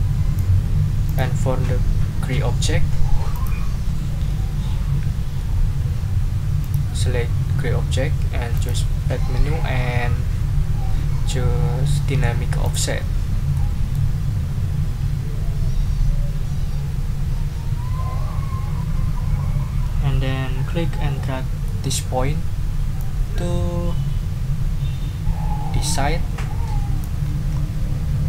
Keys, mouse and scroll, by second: 1.0 click, 3.3 click, 6.6 click, 8.5 click, 12.6 click, 13.5 click, 21.6 click, 23.0-27.2 drag, 27.2 ctrl+scroll up 2.